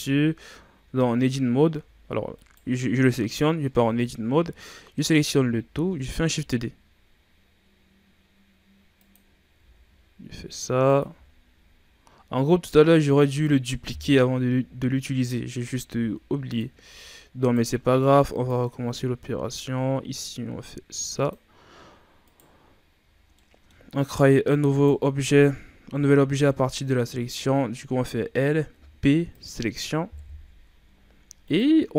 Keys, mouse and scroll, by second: 1.7 Tab, 2.3 right click, 3.6 Tab, 5.2 a, 5.4 a, 6.3 shift+d, 9.5 s, 11.0 g, 13.8 KP_3, 14.5 z, 15.1-15.5 scroll up 2, 15.7 g, 16.7-17.3 shift+scroll up 5, 17.3 right click, 17.7 b, 19.1 g, 22.2 right click, 22.8 z, 23.1 scroll down 1, 23.3 middle click, 23.8-24.6 scroll up 2, 24.6 right click, 26.3 scroll down 1, 26.4-27.9 middle drag, 27.9 l, 28.6 p, 30.1 KP_1, 30.6 Tab, 31.4 right click.